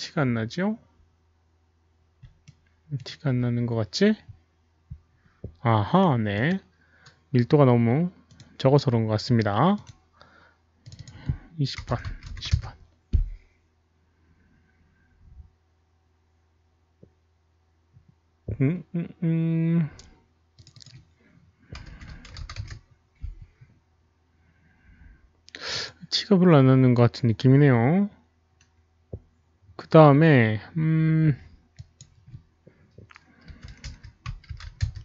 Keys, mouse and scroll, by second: 2.5-2.9 alt+middle drag, 2.5 click, 4.4 alt+middle click, 5.0 click, 6.3 click, 6.4 alt+middle click, 8.2 click, 9.7 click, 9.8 alt+middle click, 10.8 click, 10.9 click, 11.7 click, 11.7 alt+middle click, 11.7 KP_2, 11.8 KP_0, 12.0 Tab, 12.5 Return, 17.2 Tab, 17.2 click, 17.2 KP_0, 17.2 KP_2, 19.0 Return, 19.0 Tab, 19.0 click, 19.0 KP_0, 19.0 KP_2, 20.5 Tab, 20.5 click, 20.5 KP_0, 20.5 KP_2, 20.7 click, 21.8-22.2 typing, 22.2 Tab, 22.2 Return, 22.2 click, 23.2 Return, 23.2 Tab, 23.2 click, 23.2 KP_0, 23.2 KP_1, 25.7 Return, 25.7 Tab, 25.7 KP_0, 25.7 KP_1, 25.7 click, 31.4 Return, 31.4 Tab, 31.4 KP_0, 31.4 KP_1, 31.9 click, 32.7 Return, 32.7 Tab, 32.7-34.8 typing, 33.1 Return, 33.1 click, 33.9 Return, 34.2 Tab, 34.6 Tab, 34.6 Return, 34.6 click, 34.8 Return, 34.8 Tab, 34.8 click.